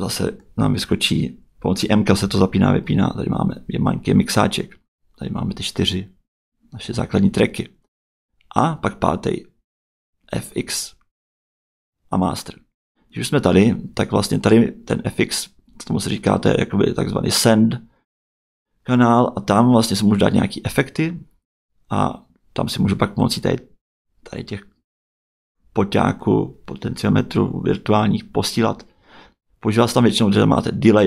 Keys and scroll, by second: 2.1 m, 6.8 m.